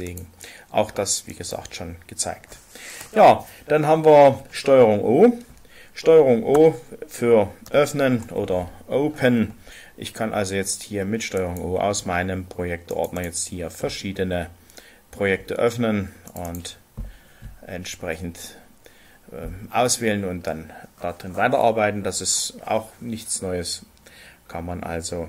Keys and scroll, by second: 7.6 ctrl+o.